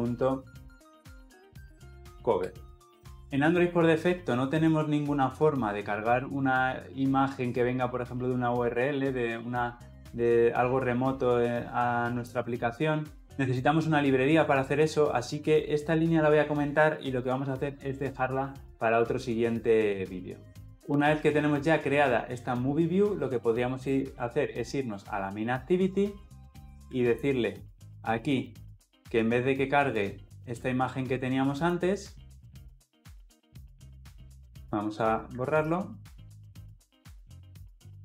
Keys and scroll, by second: 27.0 ctrl+b, 36.5 Delete.